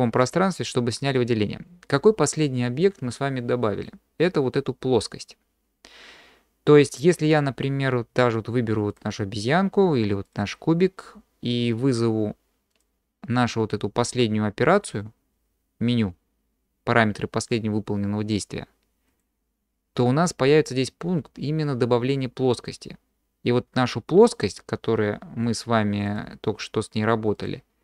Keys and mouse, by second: 3.9-4.5 drag, 4.5-6.7 middle drag, 8.9 click, 12.8-23.8 drag, 26.1-27.8 drag.